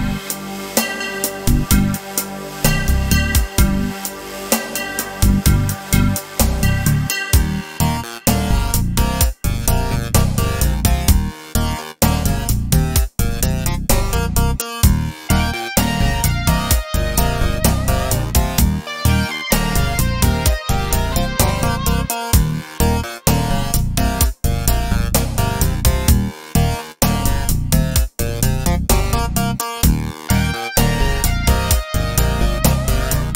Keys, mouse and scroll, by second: 1.3-6.3 shift+drag, 6.3-10.8 middle drag, 10.8 click, 12.9 click, 14.4 g, 16.8 click, 18.2 KP_Decimal, 18.9 scroll down 2, 19.1-22.5 middle drag, 22.5 click, 23.9 click, 25.1 click, 26.2 click, 27.4 click, 27.9-29.2 scroll down 2, 29.2 click, 30.1-31.2 scroll up 2, 31.2 click, 32.0 scroll down 2, 32.1 middle click, 33.1 click.